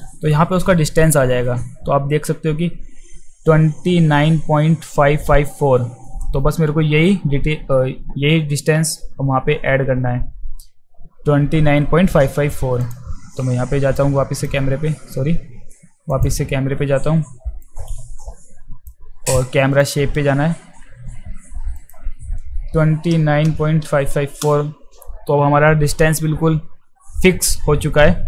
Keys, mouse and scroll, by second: 12.8 click, 14.0-14.4 drag, 16.1 click, 17.6-18.9 drag, 19.8 click, 21.8 click.